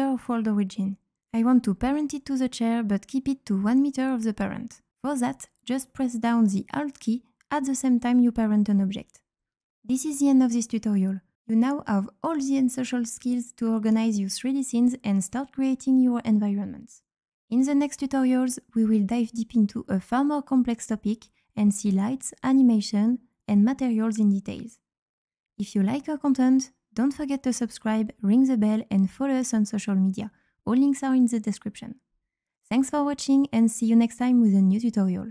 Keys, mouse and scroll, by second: 1.4 right click, 1.6 q, 2.5 click, 5.1 click, 6.5-8.4 drag.